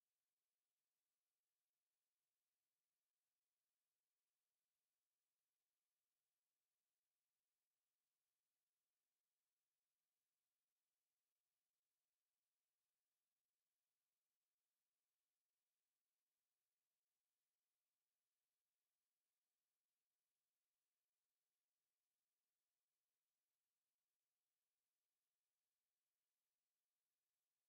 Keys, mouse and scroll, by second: 0.0-0.4 typing, 0.3 middle click, 1.7 typing, 2.3 KP_Add, 3.0 KP_Add, 3.2 typing, 3.6 KP_Add, 4.5-5.4 typing, 4.6 KP_Subtract, 5.1 KP_Subtract, 5.6 KP_Subtract, 6.2 KP_Add, 6.5 KP_Add, 7.6 1, 9.0 click, 9.9 2, 11.3-15.6 drag, 14.0 ctrl+b, 15.6 KP_Subtract, 16.4 KP_Subtract, 17.1 KP_Add, 17.6 KP_Add, 18.3 KP_Subtract, 18.7 KP_Subtract, 20.3 click, 20.8 click, 21.7 KP_Add, 22.0 KP_Add, 22.6 KP_Add, 23.6 click, 24.0 KP_Add, 24.0 click, 24.9 typing, 25.0 KP_Add, 25.3 KP_Add, 25.6 KP_Add, 26.6 click, 27.6 click.